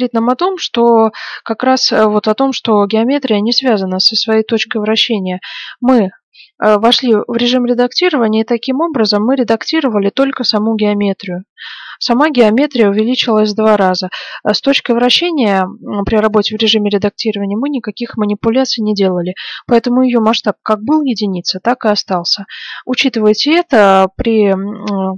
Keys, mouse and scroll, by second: 6.5-8.3 middle drag, 11.1-20.4 middle drag, 24.6-25.1 middle drag.